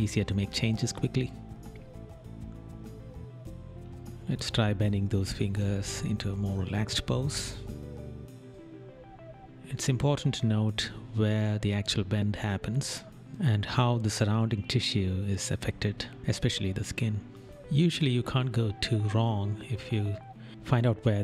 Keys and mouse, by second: 0.5 right click, 1.0 right click, 2.1 right click, 6.0 right click, 9.1 right click, 10.5 right click, 14.6 right click, 17.7 right click, 20.6 right click.